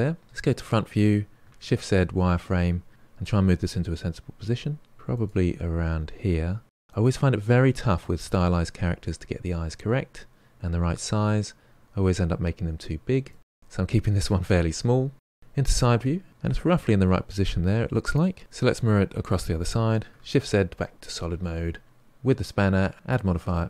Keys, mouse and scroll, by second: 0.2 KP_1, 1.5 shift+z, 2.9 shift+middle click, 3.3 g, 5.0 s, 5.8 g, 11.1 g, 15.4 KP_3, 18.4-20.1 middle drag, 20.1 shift+z.